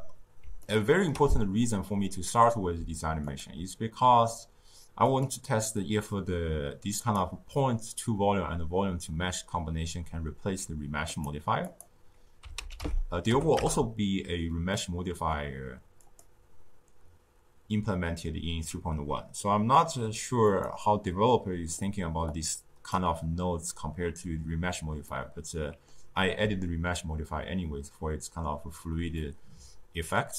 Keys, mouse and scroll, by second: 0.6-3.2 ctrl+middle drag, 3.2-6.2 drag, 7.0 click, 11.0 click, 11.6-14.7 drag, 14.7-16.0 middle drag, 16.0 click, 20.5 click, 22.3-25.1 drag, 25.1-30.3 middle drag.